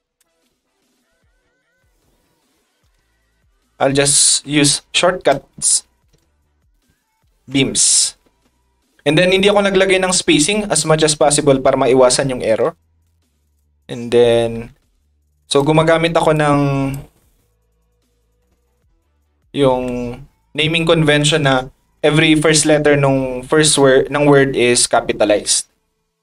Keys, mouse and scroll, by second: 1.3 r, 7.2 e, 8.2 s, 13.4 click.